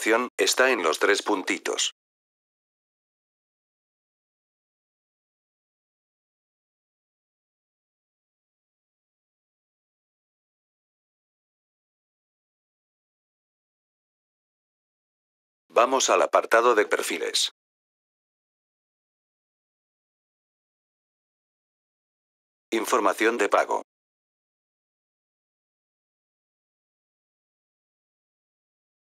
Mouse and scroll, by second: 3.0 click, 6.9 click, 11.8 click, 15.5 click, 17.3 click, 17.9 click, 22.5 click, 26.3 click.